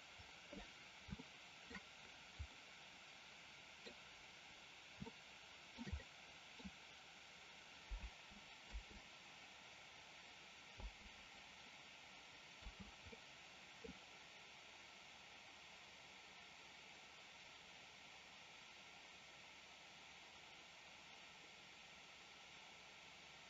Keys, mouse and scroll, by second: 1.2-1.7 shift+middle drag, 2.5-3.9 middle drag, 5.2-5.9 shift+middle drag, 6.0-6.6 middle drag, 8.0 space, 8.7 space, 12.6 space, 13.2-13.9 middle drag.